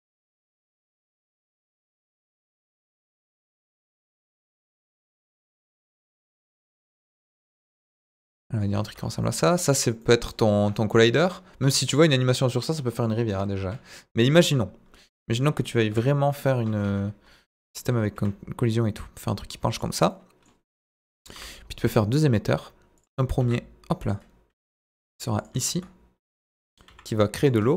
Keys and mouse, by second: 2.2 click, 2.8 click, 4.3 g, 4.3 middle click, 7.4 click, 7.6 Tab, 7.8 middle click, 8.7 z, 9.2 middle click, 10.0 middle click, 11.9 middle drag, 12.6-13.0 middle drag, 13.5 KP_1, 15.9 KP_Divide, 16.8 KP_1, 18.1 r, 19.7 click, 20.1 middle click, 21.0 KP_1, 21.2 shift+a, 23.4 s, 24.0 click, 24.5 g, 25.4 click, 25.5 z, 26.8 g, 27.4 click.